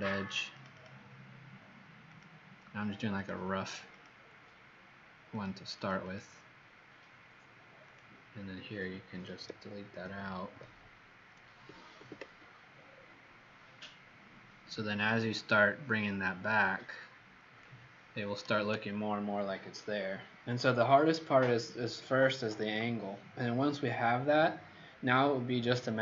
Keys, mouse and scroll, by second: 0.0 click, 0.4 click, 0.7 click, 0.8 click, 2.2 click, 5.7 click, 5.9 click, 7.8 click, 10.0 alt+Delete, 11.9 ctrl+d, 12.6-13.6 alt+scroll down 8, 13.6-14.6 alt+scroll down 1, 14.6-16.0 alt+scroll down 1, 16.0 click.